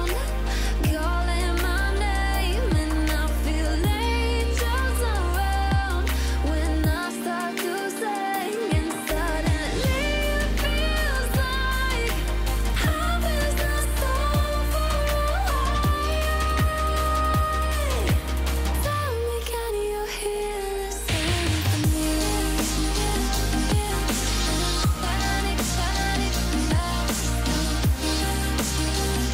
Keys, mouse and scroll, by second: 1.6-2.1 alt+scroll up 2, 2.6-5.2 alt+shift+click, 6.0-6.5 alt+scroll down 1, 6.9 alt+scroll up 1, 11.1-17.2 drag, 21.0 click, 23.8 click, 25.7 click, 26.7-27.3 alt+scroll down 1, 27.8-28.4 alt+scroll up 1, 28.6-29.3 drag.